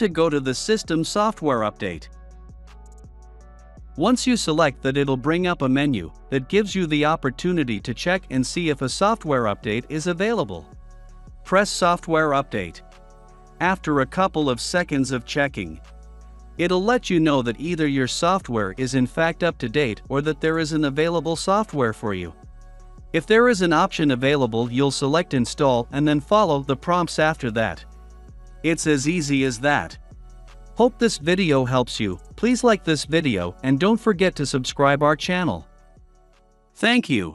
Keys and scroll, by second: 1.8 Return.